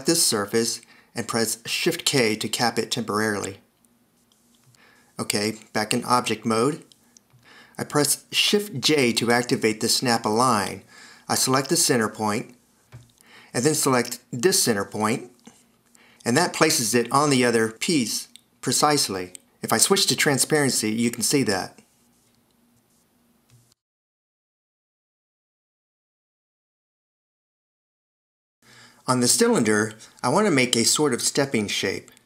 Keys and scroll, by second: 1.5 shift+k, 5.5 f, 10.0 shift+j, 17.8 t, 19.2 f, 20.1 d, 28.4 super+s, 30.1 t.